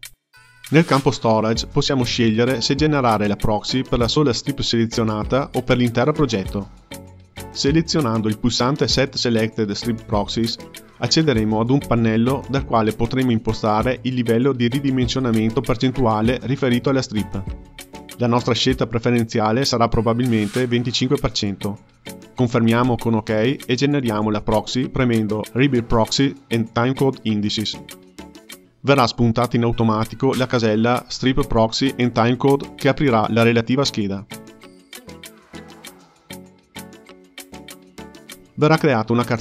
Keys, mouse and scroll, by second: 0.4-1.2 scroll down 4, 1.3-4.5 drag, 10.8-13.9 drag, 26.3 click, 39.1-39.4 scroll down 3.